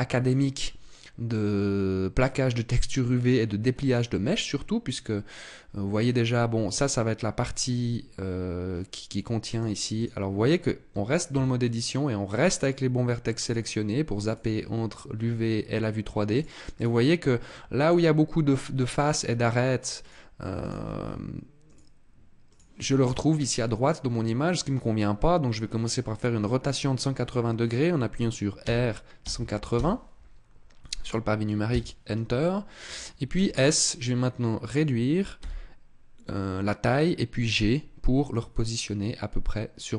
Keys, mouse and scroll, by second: 9.8 click, 10.7 Tab, 11.1 Tab, 13.2 click, 16.6 click, 17.3 middle click, 19.7 click, 20.5 click, 21.4 click.